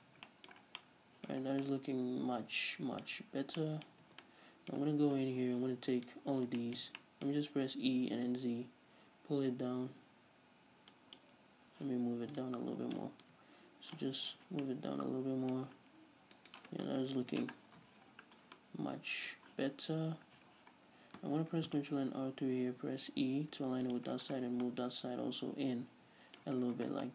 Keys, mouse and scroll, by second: 0.0 a, 0.7 scroll down 2, 1.5 scroll down 2, 3.1 scroll up 1, 3.9 scroll up 1, 4.1 Tab, 6.0 alt+right click, 6.6-12.4 shift+middle drag, 7.8 e, 11.2 shift+click, 12.4 click, 13.3-14.8 drag, 14.3 z, 14.8-16.4 middle drag, 16.4 right click, 17.1 KP_Decimal, 17.6-18.5 scroll down 2, 17.9 ctrl+z, 18.6-27.1 middle drag, 20.5 z, 20.8-21.2 scroll down 1, 21.5 ctrl+r, 24.0 shift+click, 24.1-24.5 scroll down 1, 24.5 Tab, 26.6-27.1 scroll down 2.